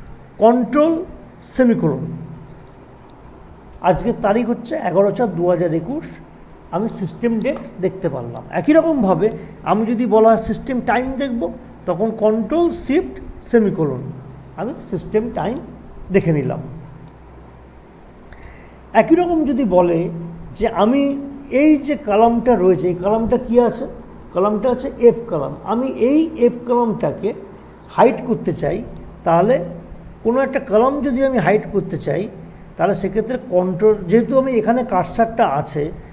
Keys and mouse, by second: 1.6 ctrl+;, 6.0 click, 18.3 click, 22.1 click, 29.2 click.